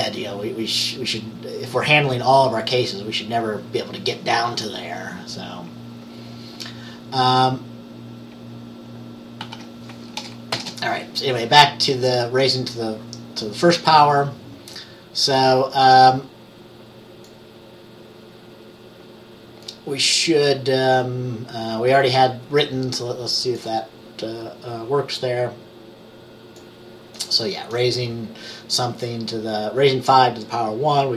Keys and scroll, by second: 9.5 ctrl+s, 10.6 ctrl+b.